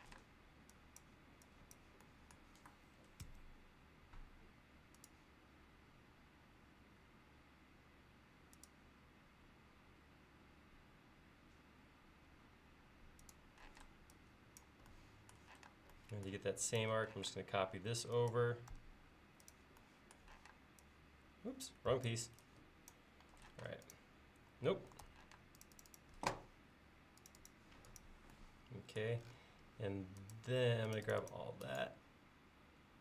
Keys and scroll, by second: 3.3 a, 13.8 p, 15.7 space, 17.3 m, 20.5 p, 22.0 Escape, 23.3 e, 25.1 super+z, 25.4 space.